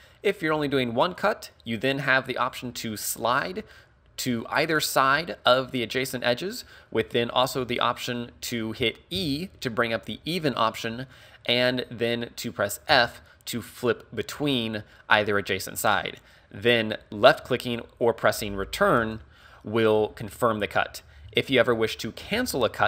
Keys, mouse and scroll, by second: 21.3 ctrl+z, 22.4 a.